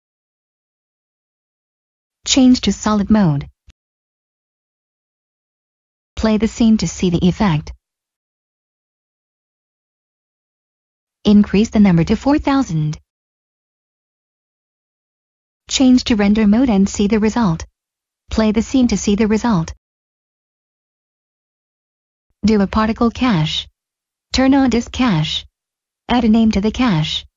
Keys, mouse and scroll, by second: 2.7 click, 10.8 click, 12.5-13.1 typing, 13.9 Return, 14.6 click, 15.1 middle click, 16.5 click, 20.7 click.